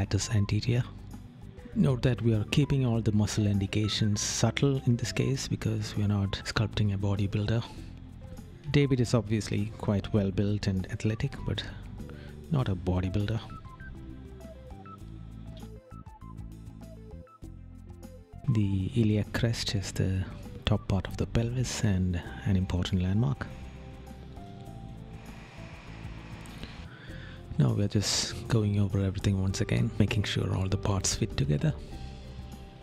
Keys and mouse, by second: 2.5 right click, 3.8 right click, 8.0 right click, 9.5 right click, 11.6 right click, 13.2 right click, 15.3 right click, 17.0 right click, 21.5 right click, 23.2 right click, 24.7 right click, 27.2 right click, 30.0 right click, 31.1 right click.